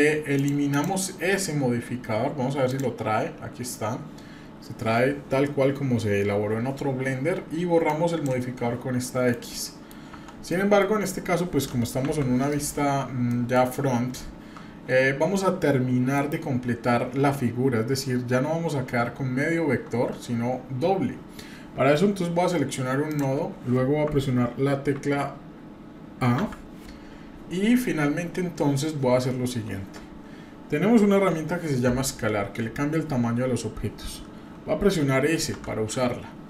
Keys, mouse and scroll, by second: 0.3 click, 0.7 click, 2.7 click, 7.8 click, 9.0 middle click, 9.6-9.9 middle drag, 10.1 Tab, 10.5 middle click, 12.0 KP_1, 12.5 scroll up 2, 13.3 shift+middle click, 13.8-14.1 scroll up 2, 14.4-15.1 shift+scroll down 2, 19.6-19.9 scroll up 1, 20.1-20.8 scroll down 1, 23.0 click, 26.4 a, 35.6 s.